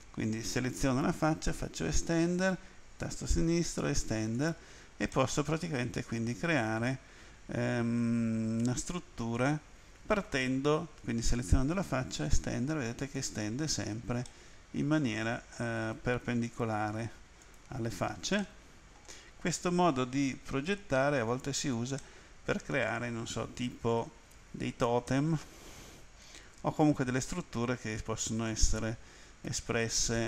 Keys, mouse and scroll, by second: 1.5 e, 2.4 click, 3.5 e, 4.4 click, 5.1 middle click, 11.1 right click, 12.2 e, 13.2 click, 14.3 middle click, 15.8 right click, 16.6 e, 17.4 click, 18.4 middle click, 22.0 middle click, 24.2-24.5 scroll down 2, 28.2 right click, 29.5 e, 30.0 click.